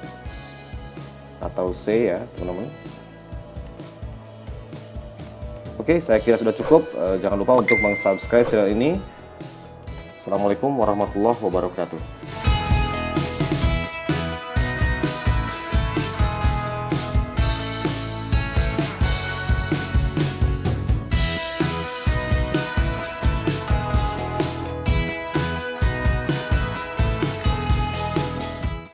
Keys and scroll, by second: 14.4 a.